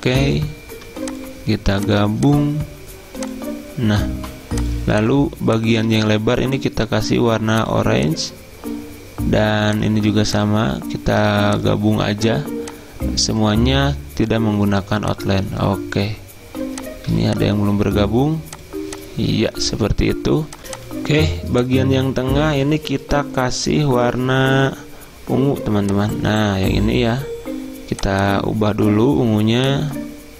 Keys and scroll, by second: 20.6 Delete, 20.6 F9.